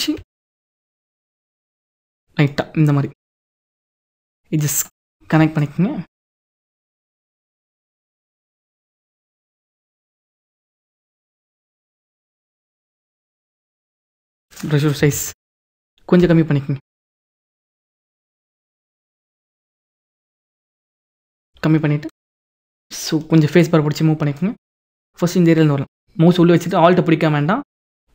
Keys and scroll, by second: 14.7 ctrl+z, 15.9 p, 17.2 b, 20.7 [.